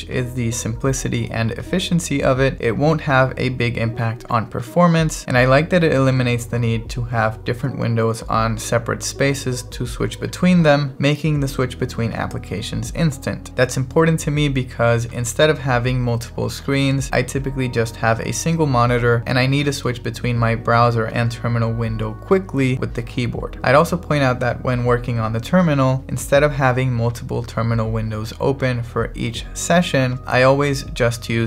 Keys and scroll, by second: 20.0 alt+b, 22.2 alt+t.